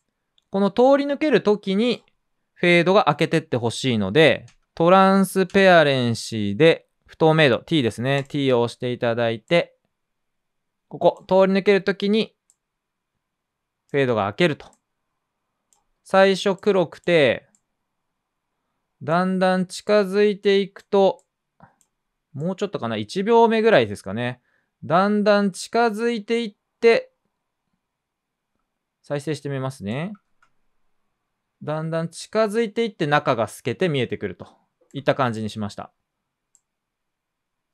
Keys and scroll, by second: 0.0-0.7 typing, 5.4 t, 30.2 space, 34.2 space.